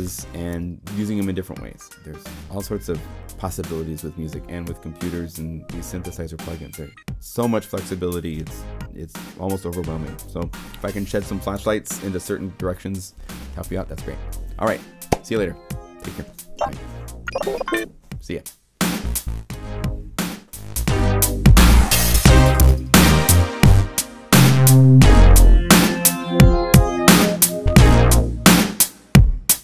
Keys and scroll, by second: 19.5 0.